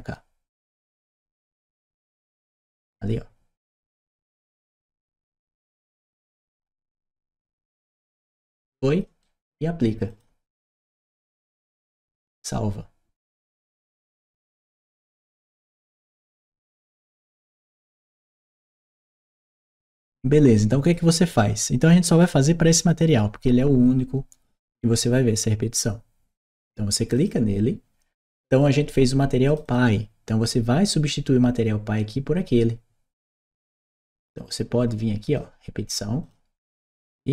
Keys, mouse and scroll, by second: 0.6 right click, 1.3 right click, 2.3-3.5 drag, 3.8 right click, 4.7-6.5 drag, 7.3 right click, 8.3 click, 9.0 right click, 9.9 click, 13.7 click, 20.4 click, 21.9 click, 26.9 click, 29.3 click, 29.5 click, 33.5-35.2 drag, 36.1 click.